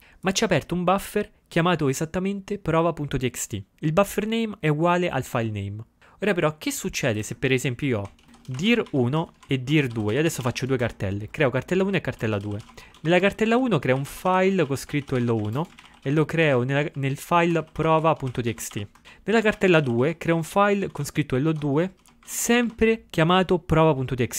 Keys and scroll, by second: 7.9-10.9 typing, 12.0-15.4 typing.